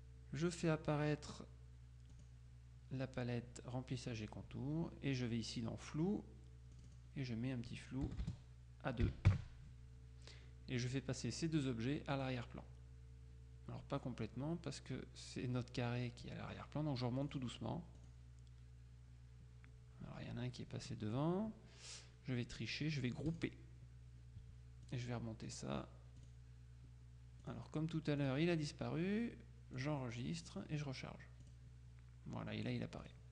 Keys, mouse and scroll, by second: 2.2 click, 6.9 click, 8.1 BackSpace, 9.1 KP_2, 9.4 KP_Enter, 12.2 click, 17.3 click, 18.1 click, 23.4 click, 25.0 click, 26.3 click, 27.5 click, 28.3 click, 29.9-31.1 drag, 31.5 click, 33.1 click.